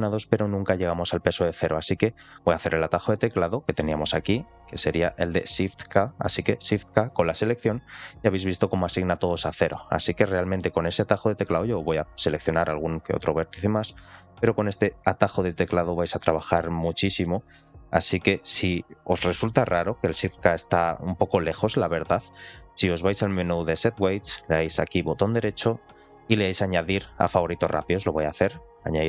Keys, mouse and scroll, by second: 3.8-5.8 drag, 7.5 shift+k, 9.0 middle click, 10.0 click, 10.3 middle click, 11.4 ctrl+click, 11.7 middle click, 12.5 shift+middle click, 13.3 ctrl+shift+click, 13.7 ctrl+shift+click, 14.1 ctrl+shift+click, 14.7 ctrl+shift+click, 15.0 ctrl+shift+click, 15.5 middle click, 16.1 ctrl+shift+click, 16.7 ctrl+shift+click, 17.4 ctrl+shift+click, 17.9 ctrl+shift+click, 23.2-29.0 drag.